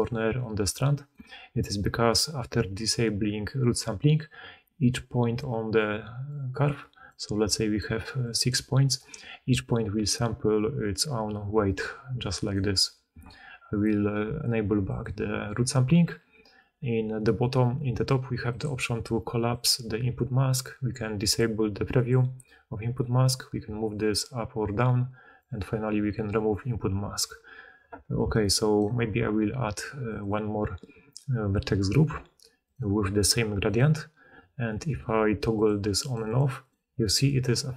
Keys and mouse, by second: 0.0-1.1 typing, 0.3-6.2 right drag, 4.3-8.0 d, 8.4 d, 11.4-14.9 drag, 11.4-17.3 middle drag, 11.4-24.8 right drag, 11.4 d, 12.4 d, 12.5 d, 13.0 d, 18.3 click, 19.4 click, 21.1 click, 21.8 click, 23.9-24.8 drag, 28.1 d, 28.7 d, 28.7 d, 35.5 click, 36.0 click, 36.3 click, 36.6-37.7 drag.